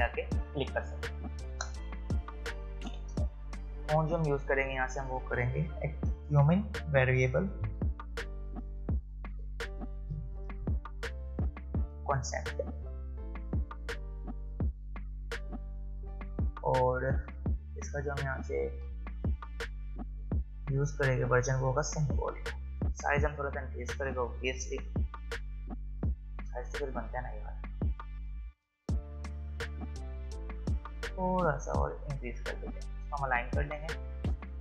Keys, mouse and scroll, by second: 1.6 click, 4.7 click, 6.6-11.1 typing, 15.7 click, 21.9 click, 27.0 click, 30.2 click.